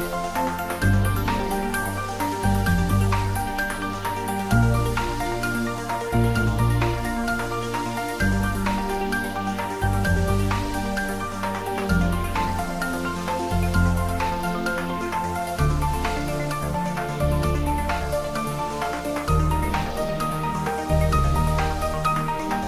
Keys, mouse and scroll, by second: 0.0 click, 0.1-1.1 typing, 1.9 click, 2.4-4.1 typing, 4.5 click, 5.7 s, 6.2 x, 9.0 click, 9.6 s, 10.2 click, 10.7 s, 12.2 click, 14.4 g, 21.5 click, 22.0-22.6 typing.